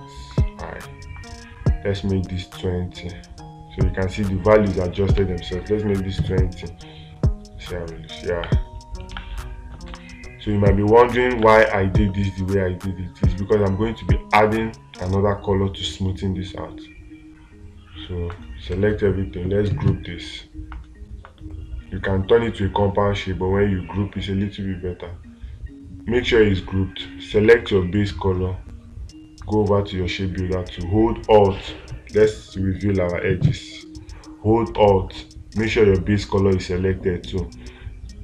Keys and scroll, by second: 9.6 space, 11.8 space.